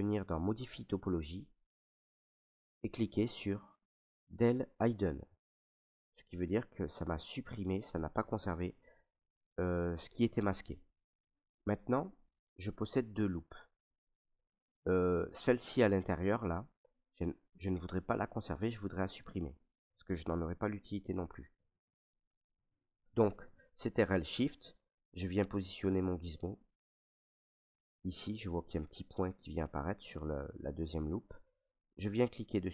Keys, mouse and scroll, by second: 0.4 click, 4.9 click, 6.4 ctrl+right click, 10.6 ctrl+click, 11.3 alt+right click, 12.1 right click, 12.9 ctrl+right click, 14.2 right click, 17.8 ctrl+right click.